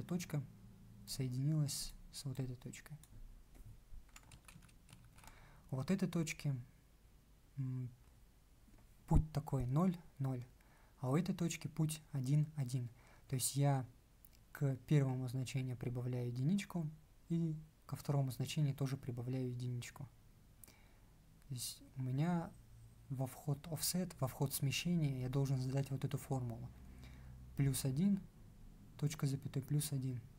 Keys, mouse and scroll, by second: 4.2 ctrl+z.